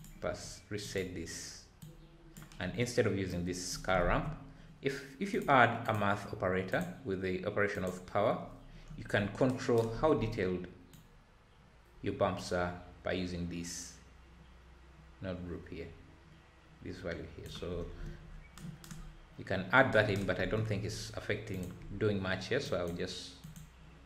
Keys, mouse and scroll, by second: 0.0 click, 0.9-1.8 drag, 5.8 shift+a, 8.3-9.3 drag, 9.3 scroll down 9, 11.0-14.0 drag, 17.9-19.7 scroll down 4, 22.6 click.